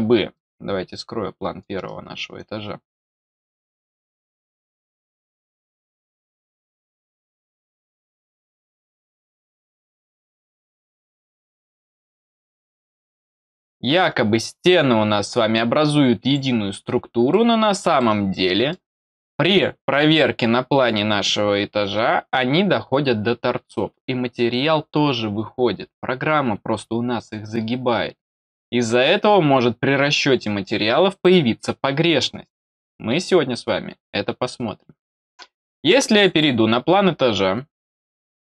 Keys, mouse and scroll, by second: 0.3-1.5 middle drag, 2.3-3.9 drag, 5.1 click, 5.9 click, 7.5 middle click, 9.1 click, 10.9 click, 11.5 click, 12.1-12.4 scroll down 2, 13.2 middle click, 14.4 scroll up 1, 16.2 click, 16.9 scroll up 1, 17.2 middle click, 18.3 middle click, 36.1 click, 36.2-38.5 drag.